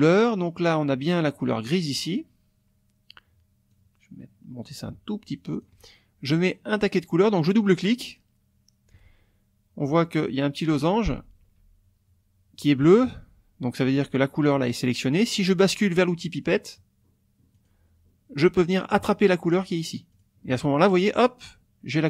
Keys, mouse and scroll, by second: 3.7-5.8 drag, 7.6 click, 17.5 click, 20.1 click.